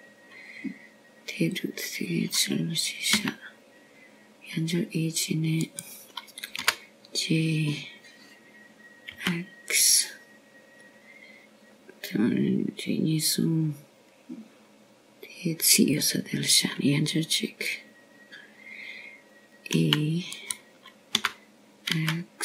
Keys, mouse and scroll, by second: 0.0 g, 6.0 e, 9.5 g.